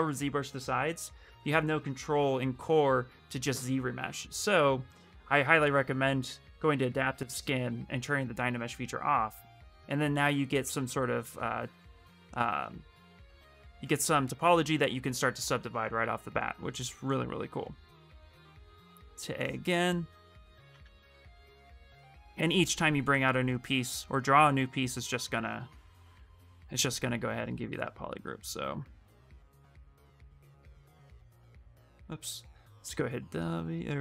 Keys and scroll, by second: 8.6 a, 9.0 a, 17.7 q, 18.5 a, 30.5 q, 32.5 w.